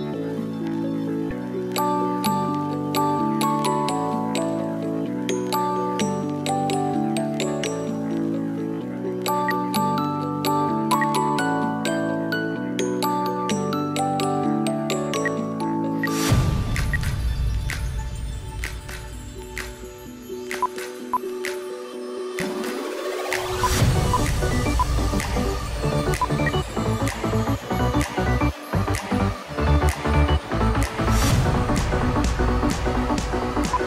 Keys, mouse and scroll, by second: 9.3 space, 10.8 ctrl+q, 11.8 double click, 15.0 Delete, 15.8 Delete, 16.7 space, 20.9 shift+click, 22.6 double click, 26.3 shift+Page_Up, 31.6 double click.